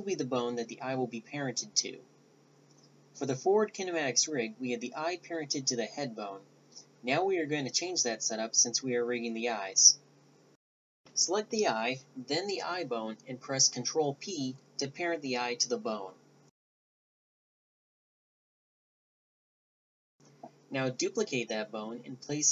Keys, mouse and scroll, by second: 5.3 ctrl+alt+s, 11.2 a, 11.4 Tab, 11.6 right click, 14.1 a, 14.4 z, 14.8 right click, 15.8 right click, 16.2 click, 16.9 ctrl+p, 17.4-18.3 middle drag, 18.3 Tab, 18.4 a, 18.5 right click, 18.8 click, 19.5-20.7 right drag, 21.1 right click, 21.8 click, 22.0 a, 22.1-22.5 right drag.